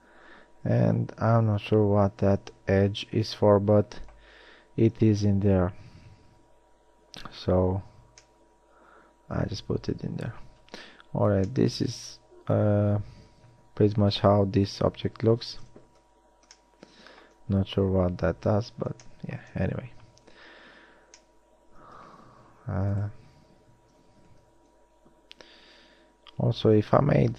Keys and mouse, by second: 0.0 a, 13.7-15.7 middle drag, 15.7 KP_1, 24.8 KP_3, 25.9 z, 26.6 a.